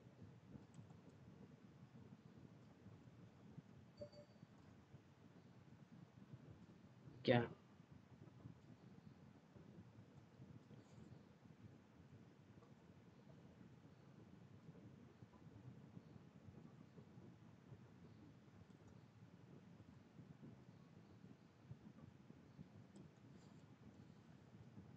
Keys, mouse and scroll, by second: 0.6 shift+click, 4.3 click, 4.7 scroll down 1, 5.6 middle click, 6.9 click, 6.9 middle click, 9.9-14.9 drag, 18.6-23.6 drag, 23.8 middle click.